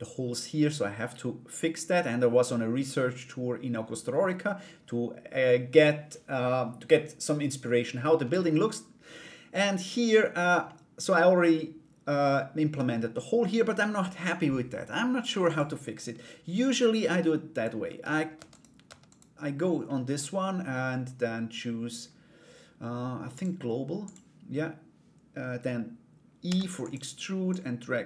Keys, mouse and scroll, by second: 10.2 middle click, 15.0 click, 16.6 Tab, 17.1 right click, 18.1 right click, 18.6 right click, 19.4 middle click, 22.9 click, 27.2 click.